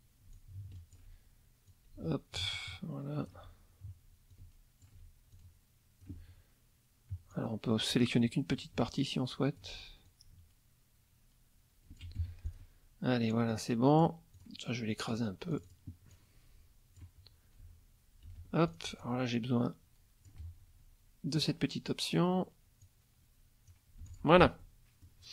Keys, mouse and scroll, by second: 0.3 alt+click, 1.7-3.4 alt+drag, 4.3 alt+click, 5.3 alt+click, 7.3 click, 9.0 alt+click, 10.1-12.2 alt+drag, 12.2 alt+F1, 12.5 alt+click, 13.5-14.2 drag, 14.3 click, 15.1 click, 15.5 click, 16.1 click, 17.6 F1, 18.3 F2, 18.7 click, 21.4 click, 22.8 click, 24.0 F1, 24.1 click, 24.6 middle click.